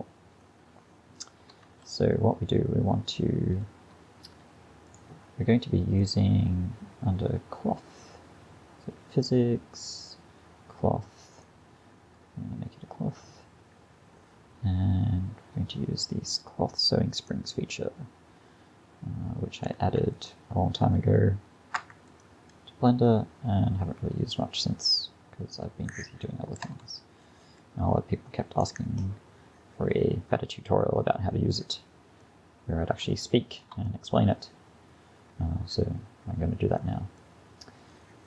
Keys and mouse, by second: 4.9-6.0 drag, 6.0-11.4 middle drag, 11.4-32.3 drag, 32.3-34.6 middle drag, 37.5-38.2 middle drag.